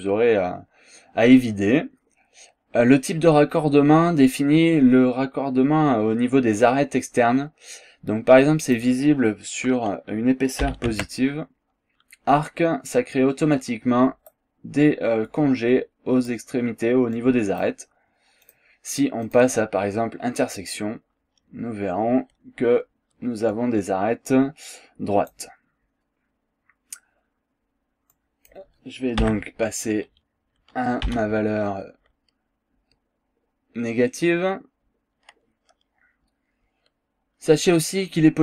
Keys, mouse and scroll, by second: 8.5 click, 10.7 KP_4, 10.9 Tab, 13.5 click, 15.3-16.5 drag, 16.6 scroll down 1, 16.8-17.1 scroll up 2, 17.2 click, 18.5 click, 19.3 click, 23.5-25.5 drag, 26.2 scroll down 2, 26.5 scroll up 2, 28.2 click, 29.2 KP_Subtract, 31.1 KP_2.